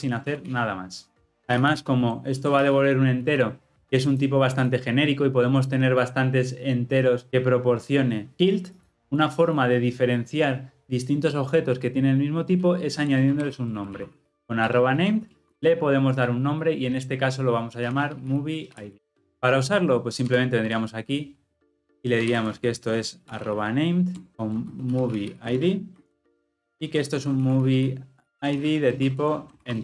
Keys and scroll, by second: 0.2 ctrl+alt+l, 0.4 ctrl+alt+o, 3.2 Escape, 14.7 Return, 20.4 Tab, 24.1 Tab, 25.6 Return.